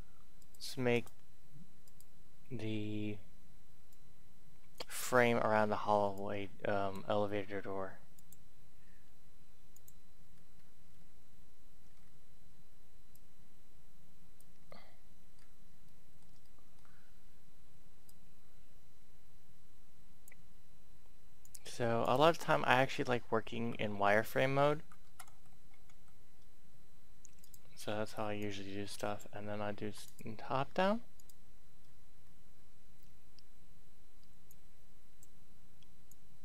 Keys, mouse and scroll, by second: 2.6-3.6 scroll down 1, 3.9 click, 4.9-6.1 scroll up 1, 6.1-7.6 drag, 10.3-10.6 scroll up 1, 10.6-11.0 scroll down 1, 11.2-11.8 shift+scroll, 11.8-12.1 scroll up 2, 13.1-14.6 drag, 14.7 middle click, 15.3-15.8 scroll up 1, 15.9 shift+middle click, 16.4 middle click, 16.9-17.9 scroll up 1, 17.9-20.6 drag, 22.4-22.8 scroll up 1, 22.8-23.5 scroll down 1, 24.0-25.0 scroll up 2, 27.4 click, 27.6-29.6 drag, 32.6 shift+scroll, 33.0-34.4 scroll down 1, 34.4-36.4 drag.